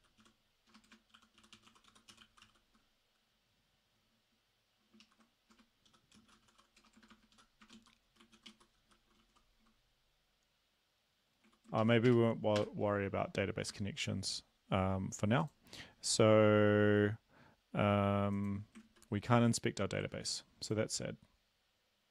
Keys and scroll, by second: 0.0-2.4 typing, 5.0 ctrl+shift+Left, 5.5-9.2 typing, 11.8 ctrl+shift+Left, 12.1 BackSpace, 12.6 BackSpace, 13.7 Escape, 18.9 ctrl+`, 20.1 ctrl+`.